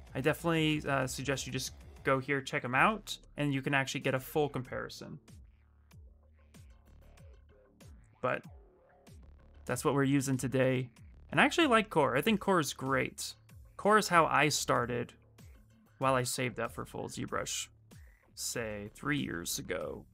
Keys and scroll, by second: 2.5 ctrl+c, 6.0 ctrl+v, 6.4 Return.